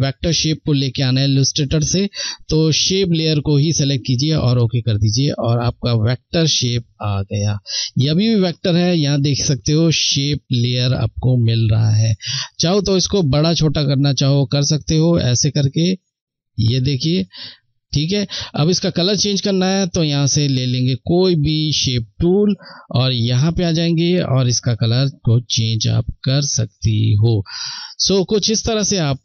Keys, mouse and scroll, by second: 3.2 click, 10.7 ctrl+Num_Lock, 10.7 click, 11.5 ctrl+t, 12.8 shift+click, 15.1 click.